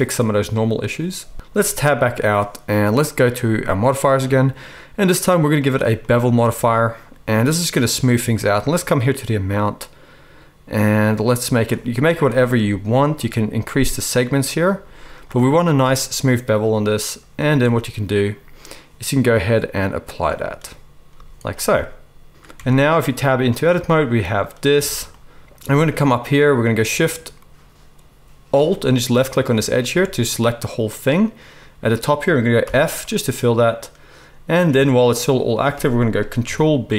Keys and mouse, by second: 1.5 Tab, 11.9 z, 14.8 z, 17.4 z, 21.1 z, 22.5 Tab, 24.7 alt+a, 28.9 alt+shift+middle click, 29.2-36.1 alt+shift+right drag, 32.6 f, 36.1 ctrl+click, 36.4 ctrl+b, 36.6-36.9 right drag.